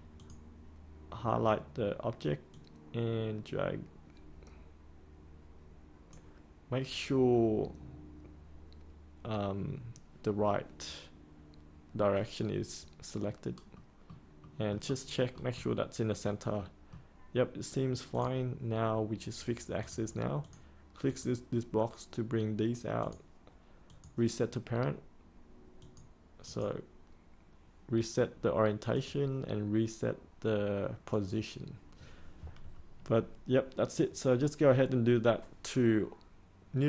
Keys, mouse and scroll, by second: 13.7 middle click, 18.1-36.8 drag.